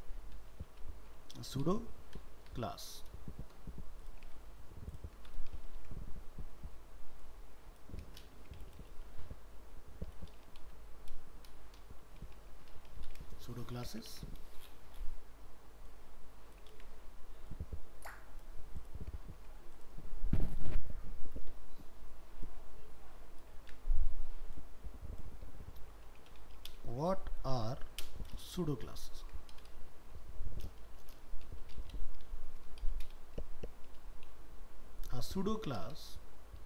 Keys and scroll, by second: 4.4 ctrl+s, 5.7 ctrl+Home, 13.3 ctrl+shift+Left, 14.1 ctrl+c, 16.7 ctrl+v, 23.6 ctrl+v, 29.0 ctrl+Left.